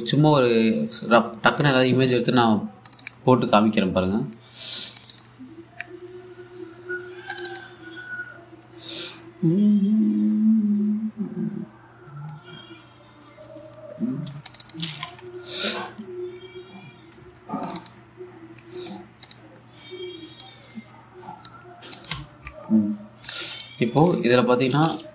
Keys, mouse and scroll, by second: 0.4 super+e, 3.5 click, 5.6 click, 7.9 click, 11.8-12.6 scroll down 1, 15.1 click, 17.4-17.8 scroll up 1, 18.3 click, 19.9 click, 21.0-22.6 drag, 22.8 1, 23.7 scroll down 1, 23.9 alt+click, 24.3 scroll up 1, 24.6 click.